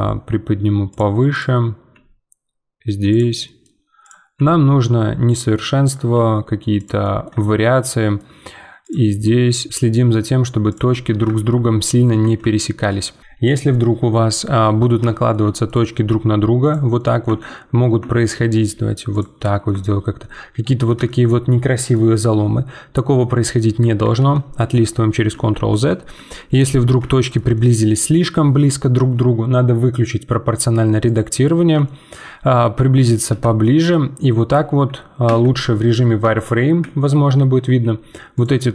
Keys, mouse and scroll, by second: 1.3 click, 1.9 g, 3.3 middle click, 4.0 click, 4.3 g, 5.8 click, 6.1 g, 7.0-8.8 middle drag, 8.8 click, 9.2 g, 9.7 g, 10.9 Tab, 11.3 shift+middle click, 11.6 scroll up 4, 12.1 Tab, 12.5 shift+middle click, 15.0 shift+middle click, 15.9 g, 16.9 middle click, 17.2 Tab, 17.5-18.0 scroll down 2, 18.0 Tab, 18.5 g, 19.3 middle click, 19.7 Tab, 20.2-24.2 middle drag, 24.2 ctrl+z, 24.6 ctrl+z, 27.1-30.6 shift+middle drag, 31.0 click, 31.4 middle click, 31.4-31.8 scroll up 2, 31.8 shift+middle click, 32.3 scroll up 2, 32.5 middle click, 33.3 z, 33.6 middle click, 34.5 z, 35.2 z, 37.6 g.